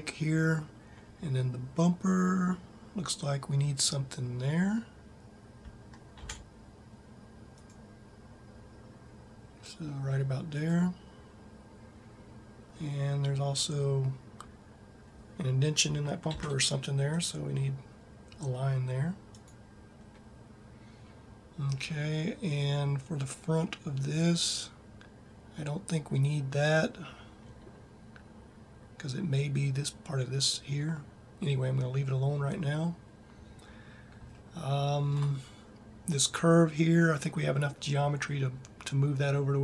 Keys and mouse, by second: 5.9 ctrl+r, 16.1 ctrl+r.